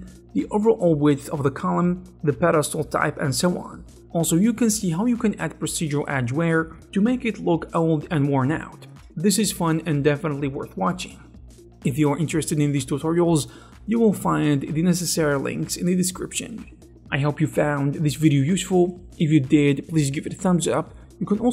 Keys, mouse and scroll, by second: 0.3 click, 0.8 middle click, 1.7-3.3 drag, 3.3 middle click, 3.3 z, 3.7 click, 4.6 shift+a, 7.1 shift+space, 7.3 v, 9.1 click.